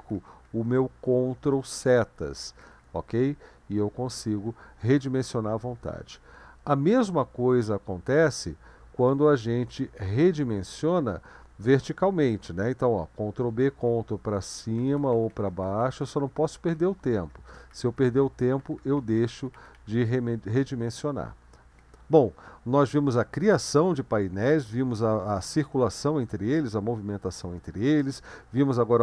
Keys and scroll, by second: 0.0 ctrl+Right, 0.2 ctrl+Right, 0.4 ctrl+Right, 0.6 ctrl+Right, 0.7 ctrl+Right, 1.3 ctrl+Right, 1.5 ctrl+Left, 1.7 ctrl+Left, 1.9 ctrl+Left, 2.1 ctrl+Left, 2.3 ctrl+Left, 2.7 ctrl+Right, 2.8 ctrl+Right, 3.0 ctrl+Right, 3.2 ctrl+Right, 3.4 ctrl+Right, 6.9 ctrl+b, 7.8 Right, 13.4 ctrl+b, 13.9 ctrl+Up, 14.1 ctrl+Up, 14.3 ctrl+Up, 14.4 ctrl+Up, 14.6 ctrl+Up, 14.8 ctrl+Down, 15.0 ctrl+Down, 15.1 ctrl+Down, 15.3 ctrl+Down, 15.5 ctrl+Down, 15.8-18.7 typing, 16.6 ctrl+Up, 16.8 ctrl+Up, 17.1 ctrl+Up, 17.3 ctrl+Up, 18.8 ctrl+Down, 19.0 ctrl+Down, 19.4 ctrl+Down, 19.6 ctrl+Down, 19.8 ctrl+Down.